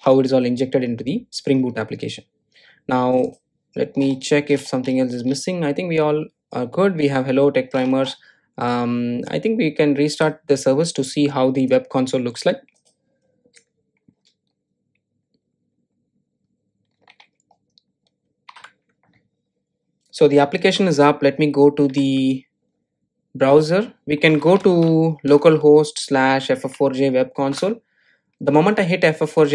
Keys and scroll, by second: 10.7 ctrl+r.